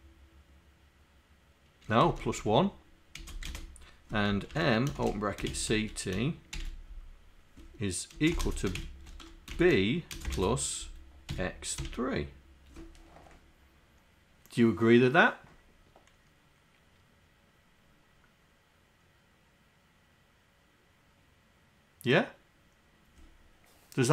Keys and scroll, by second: 2.0 BackSpace, 2.2 BackSpace, 3.2 space, 3.5 space, 5.0-6.6 typing, 8.2 space, 8.5 space, 11.8 3.